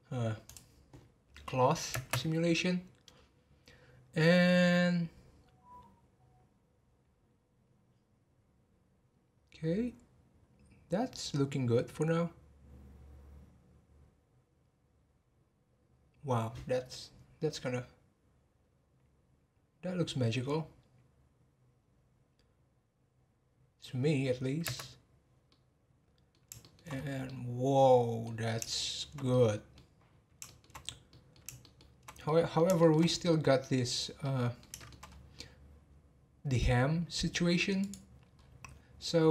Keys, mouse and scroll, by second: 0.4 click, 1.9 space, 24.9 space, 25.5-26.9 middle drag, 26.9-27.2 scroll up 2, 27.2-28.3 middle drag, 28.3-28.7 scroll down 2, 28.7-30.0 shift+middle drag, 30.0-30.4 scroll down 1, 30.4-30.8 shift+middle drag, 30.8 scroll up 3, 31.1-33.0 middle drag, 33.0 scroll up 2, 33.3-35.0 middle drag, 35.0 scroll up 2, 35.3-36.6 middle drag, 36.6-37.8 scroll down 2, 37.8 click, 38.3-38.8 scroll down 4.